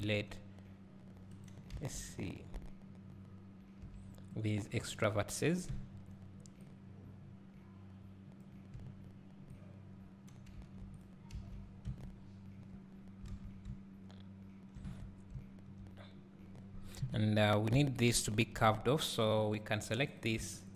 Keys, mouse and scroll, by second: 1.4 b, 1.5 right click, 8.4 b, 11.0 x, 11.9 Tab, 13.7 `, 15.0 Tab, 17.0 KP_3, 18.2 ctrl+KP_1, 19.2-20.2 scroll up 1, 20.2 click.